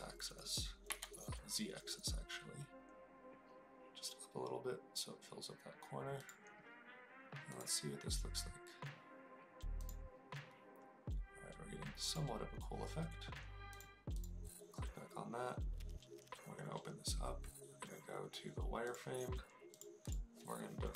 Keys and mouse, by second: 0.9 z, 7.9 click, 13.6 click, 18.8 click, 19.7 click.